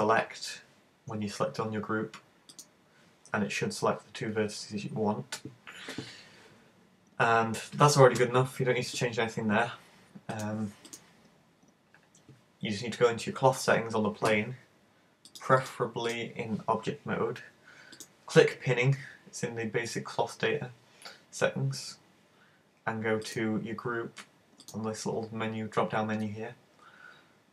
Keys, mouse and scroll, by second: 2.5 click, 7.1-9.3 scroll down 18, 10.3 click, 10.9 click, 15.3 click, 15.6 click, 18.0 click, 23.3 click.